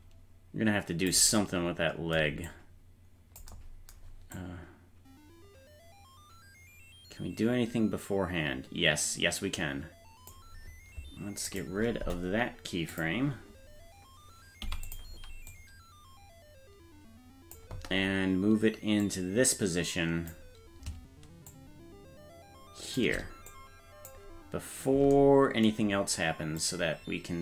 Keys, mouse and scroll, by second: 2.5 click, 4.3-10.3 drag, 11.5 right click, 12.0 Delete, 14.6 i, 15.5-17.6 drag, 19.0-20.3 drag, 21.5-23.0 shift+drag, 23.5 click, 26.6-27.4 drag.